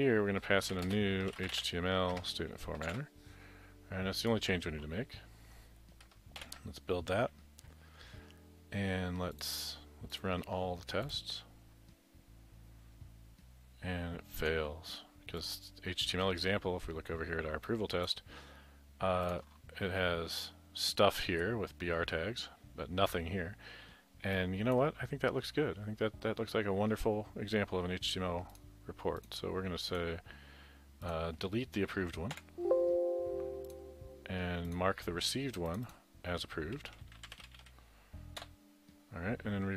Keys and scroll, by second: 0.5-3.1 typing, 6.4 ctrl+shift+b, 32.4 Delete, 36.6-38.4 typing.